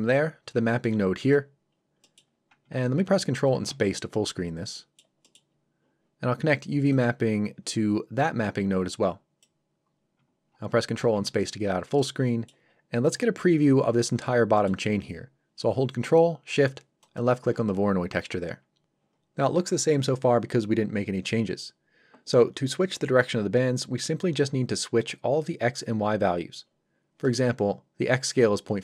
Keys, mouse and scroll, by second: 1.7-2.0 scroll down 1, 2.0 middle click, 3.5 ctrl+space, 4.0 scroll up 1, 4.7 middle click, 5.5-6.9 scroll up 1, 6.9 click, 11.0 ctrl+space, 12.0 middle click, 12.7-13.0 scroll down 1, 13.1 middle click, 17.0 ctrl+shift+click, 26.3 scroll up 1, 27.2 middle click, 27.6-28.8 scroll up 1.